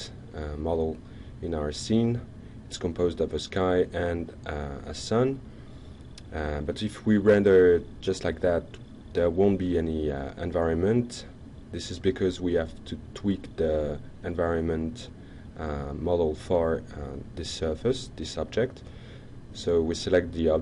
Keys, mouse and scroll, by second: 0.3 y, 1.2 Down, 2.9 Return, 5.4-9.4 alt+drag, 9.7 alt+middle click, 11.1 click, 12.1 click, 13.1 click, 14.1 click, 15.9 click, 17.2 click, 19.5 click.